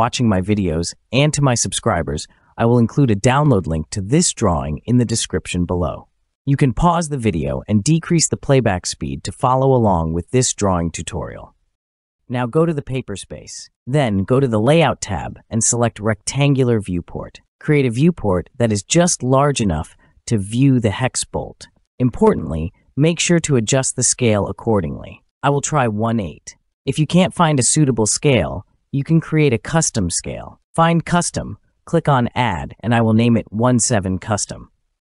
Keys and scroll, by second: 32.6-33.6 typing.